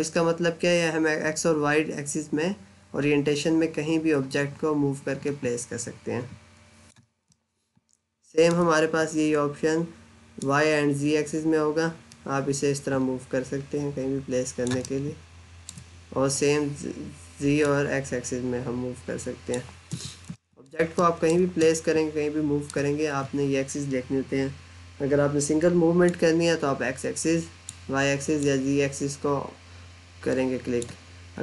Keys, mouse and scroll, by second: 7.4 alt+middle click, 10.2 click, 14.7 alt+middle click, 17.4 click, 19.8 z, 20.4 alt+middle click, 20.7 scroll down 1, 20.8 middle click, 25.9 click.